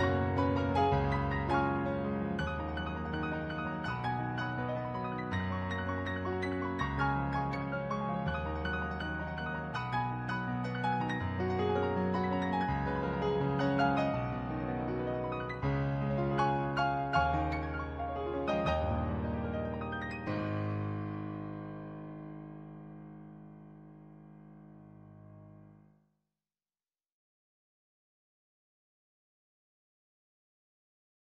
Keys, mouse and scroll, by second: 0.2 ctrl+z, 1.4 ctrl+z, 2.8 ctrl+z, 3.0 ctrl+z, 4.1 ctrl+z, 5.4 ctrl+z, 6.6 ctrl+z, 8.7 ctrl+z, 9.2 ctrl+z, 9.8 ctrl+z, 12.6 ctrl+z, 13.6 ctrl+z, 14.6 ctrl+z, 15.4 ctrl+z, 16.2 ctrl+z, 16.6 ctrl+z, 18.9 ctrl+z, 19.3 ctrl+z, 20.1 ctrl+z, 23.0 ctrl+z, 25.1 ctrl+z, 26.1 ctrl+z, 26.7 ctrl+z, 27.7 ctrl+z, 28.8 ctrl+z, 29.2 ctrl+z, 29.8 ctrl+z, 30.6 ctrl+z, 31.0 ctrl+z.